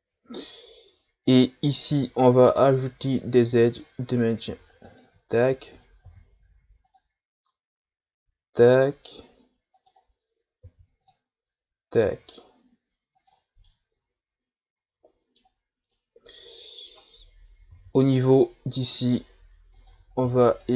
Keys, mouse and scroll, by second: 1.9 ctrl+r, 6.1 ctrl+r, 10.6 ctrl+r, 13.7-15.6 middle drag, 15.6-15.9 scroll down 1, 15.9-17.7 middle drag, 17.7 ctrl+r, 20.2 ctrl+r.